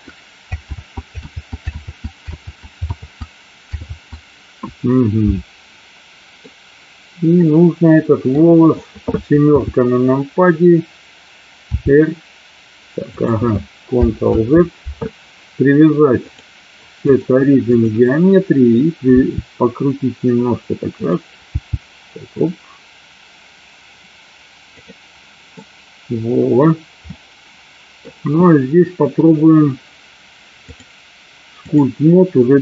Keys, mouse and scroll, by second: 0.7 ctrl+z, 1.3 ctrl+z, 1.8 ctrl+z, 2.4 ctrl+z, 3.0 ctrl+z, 4.0 ctrl+z, 6.5-8.5 middle drag, 9.6 KP_7, 11.8 r, 13.2 click, 14.5 ctrl+z, 16.2-18.1 drag, 19.2 r, 21.0 click, 21.6 g, 24.8 click, 25.7-26.6 middle drag, 27.3-28.1 middle drag, 30.8-32.0 drag.